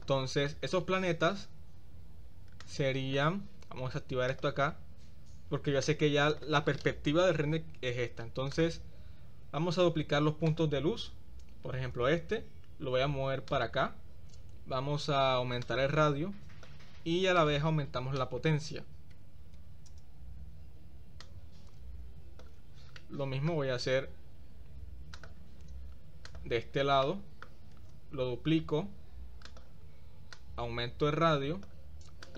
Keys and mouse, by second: 2.6 click, 4.3 click, 5.8 click, 10.6 click, 12.1 shift+d, 15.6-16.9 drag, 17.5-20.1 drag, 21.3-22.7 drag, 23.1-23.7 middle drag, 26.4-26.8 drag, 27.2 shift+middle click, 28.0 shift+d, 30.6-32.0 drag.